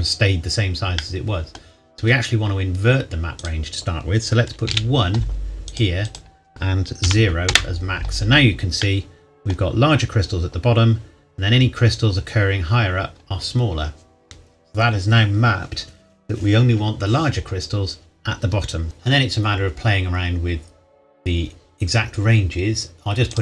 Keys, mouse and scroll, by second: 1.0 middle click, 3.4 click, 4.6 KP_1, 5.7 click, 7.0 KP_0, 7.5 KP_Enter, 8.8 middle click, 11.3-13.4 scroll up 1, 17.4-18.8 scroll down 1, 18.8-19.7 scroll up 1, 19.7-21.2 scroll down 1, 23.3 click.